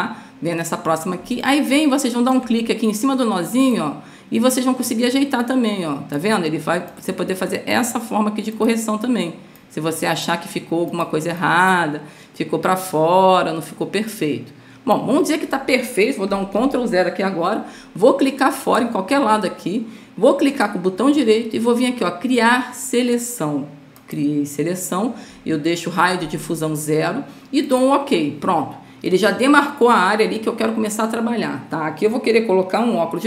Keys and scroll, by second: 1.6 space, 17.0 ctrl+0.